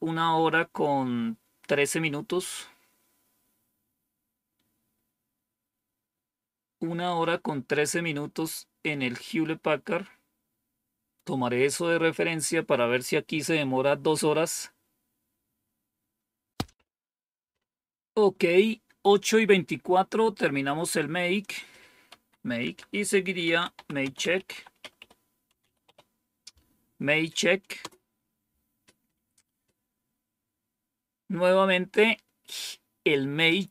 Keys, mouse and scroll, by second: 21.3 click, 22.0 Up, 22.5 Down, 23.2-26.2 typing.